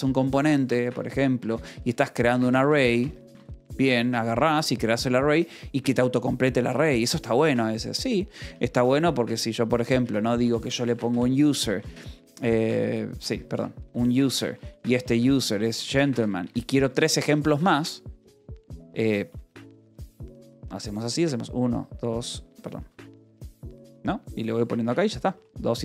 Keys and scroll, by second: 0.1 j, 1.3-4.3 typing, 1.5 Return, 8.5 Return, 10.4 u, 11.0 space, 12.0 BackSpace, 13.1-17.1 typing, 17.4 Escape, 18.8-21.1 typing, 22.5 u, 22.8 j, 23.3 p, 24.4-25.8 typing, 24.8 Escape.